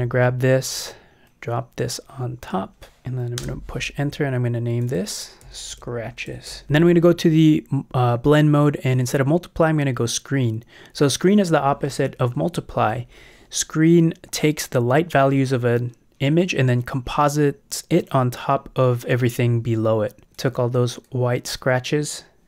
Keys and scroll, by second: 3.4 alt+shift+Left, 3.7 shift+Return, 4.4 Return, 5.2-7.0 typing.